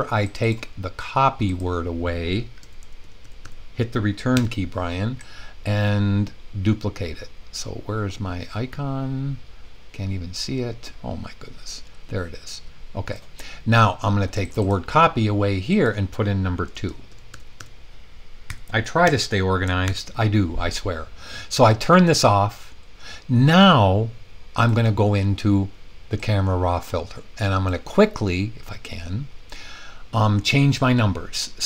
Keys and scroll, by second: 4.3 Return, 16.6 Return, 18.5 2, 19.1 Return, 19.8 super+s.